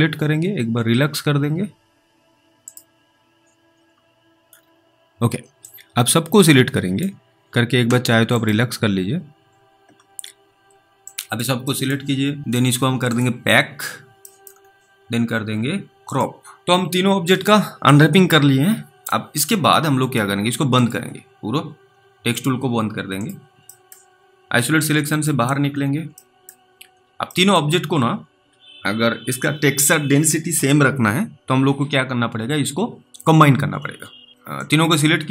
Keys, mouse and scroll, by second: 3.7-4.3 scroll up 3, 4.5-5.4 scroll down 1, 5.9 scroll down 2, 5.9 click, 8.4 click, 10.8-11.2 scroll down 2, 11.4 click, 12.0 middle click, 13.1 click, 13.7-14.4 scroll down 1, 14.4 scroll down 1, 14.6 middle click, 15.4-15.9 scroll down 1, 16.1 click, 16.6-17.6 scroll up 1, 20.8 click, 24.0 middle click, 25.2 click, 25.6-26.4 scroll down 3, 26.5 middle click, 26.8 scroll up 2, 27.0 scroll down 1, 27.6 middle click, 27.8-28.8 scroll up 1, 34.8 click.